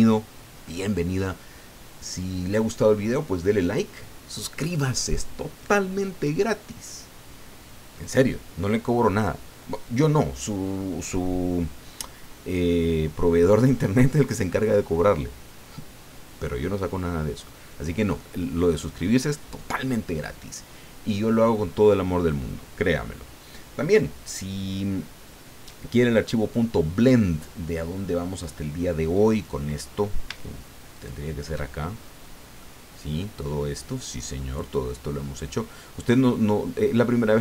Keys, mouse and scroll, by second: 30.9 shift+click, 31.8-32.3 shift+scroll down 1, 32.6-35.0 drag, 35.1-35.7 scroll up 1, 35.9 scroll down 1, 36.5 scroll down 1, 37.0-37.4 middle drag.